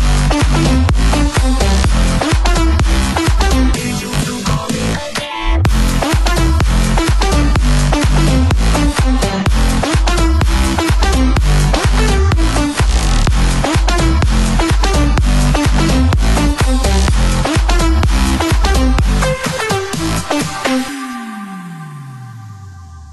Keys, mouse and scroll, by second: 0.9 click, 1.5 click, 2.7 middle click, 3.7 middle click, 4.5 click, 5.0-6.4 drag, 6.5 click, 6.9 click, 7.7 middle click, 8.2 click, 9.2 click, 10.3 middle click, 10.8 r, 13.0 click, 14.5 typing, 14.7 click, 16.1 middle click, 17.7 click, 21.0 click, 21.9 click.